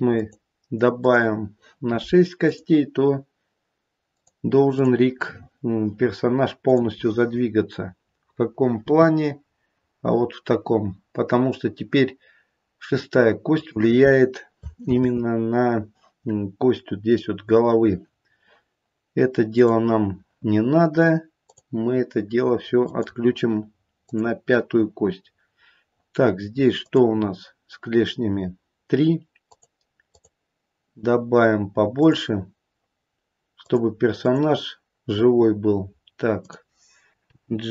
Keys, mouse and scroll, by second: 0.1 click, 0.9 click, 7.4 click, 7.4-8.7 scroll down 1, 8.7-9.7 scroll down 1, 8.7 g, 14.9 ctrl+z, 19.5 click, 21.4 click, 25.5-26.8 scroll up 1, 26.8 click, 29.4 click, 31.9 click, 37.3 click, 37.3 g.